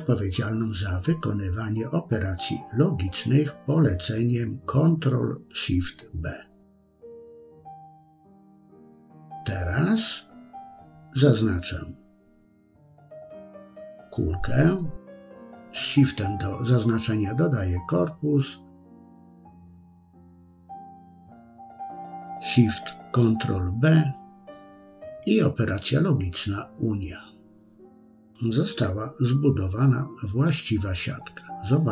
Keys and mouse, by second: 9.0-10.1 middle drag, 16.1 shift+click, 23.5 ctrl+shift+b, 27.9-28.6 middle drag, 31.1-31.9 drag.